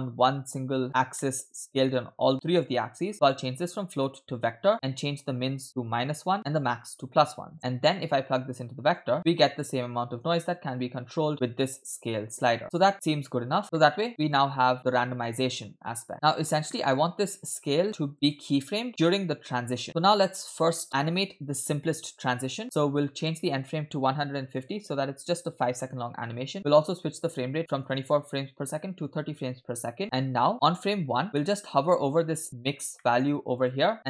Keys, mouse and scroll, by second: 1.2-2.7 middle drag, 3.2-4.5 drag, 4.8-6.4 shift+drag, 7.3-7.9 scroll down 2, 8.0-9.1 drag, 9.3 shift+middle click, 10.2-13.6 shift+drag, 13.6 scroll down 2, 13.8 middle click, 14.3-16.4 drag, 16.7 middle click, 17.3-17.8 scroll down 3, 17.9 click, 18.3 scroll up 2, 18.9 shift+middle click, 19.9 middle click, 19.9 scroll down 3, 20.9 middle click, 22.6-23.1 scroll down 1, 23.2-24.6 drag, 26.6 click, 27.8-29.3 drag, 30.5 click, 31.4 middle click, 31.6-32.7 scroll up 6, 32.2 middle click, 33.0 middle click, 33.6 click.